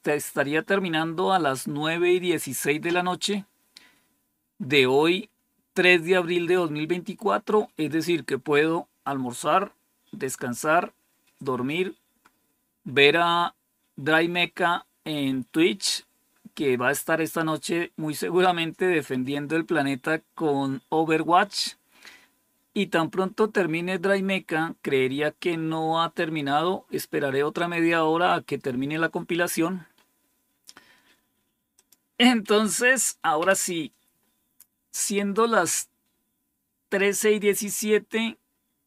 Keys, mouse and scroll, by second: 30.8 scroll down 2, 31.7 click, 33.3 Page_Down, 36.0 scroll down 2, 37.1 scroll down 2, 37.6-38.8 scroll up 2.